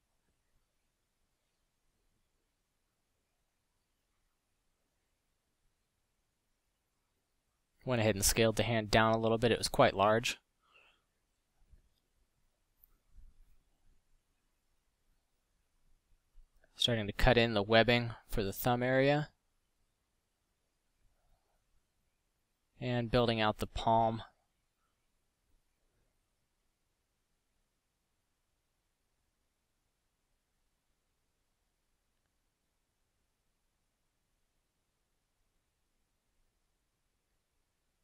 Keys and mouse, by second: 0.4 s, 2.1 KP_Decimal, 6.8 f, 23.2 middle drag, 30.8 middle drag, 33.1-33.9 middle drag.